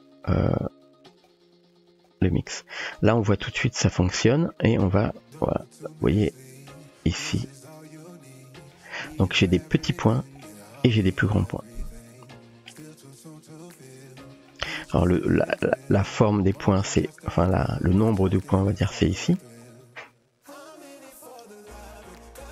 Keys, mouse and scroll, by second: 0.4-1.5 drag, 2.1 click, 3.3-3.9 shift+middle drag, 5.6-8.8 drag, 9.6 shift+middle drag, 10.5 shift+middle drag, 11.5-12.7 shift+middle drag, 14.5 middle click, 15.7-22.5 drag.